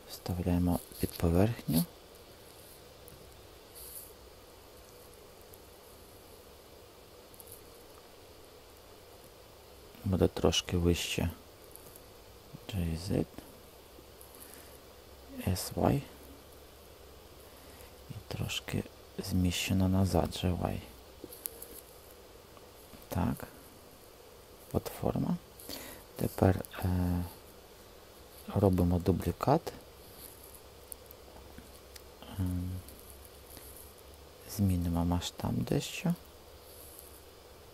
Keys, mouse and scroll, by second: 1.0 i, 2.1 b, 3.0 i, 10.5 g, 11.7 z, 15.2 s, 15.7 y, 19.7 g, 20.2 y, 27.0 shift+s, 28.6 shift+d, 29.2 Return, 34.7 s.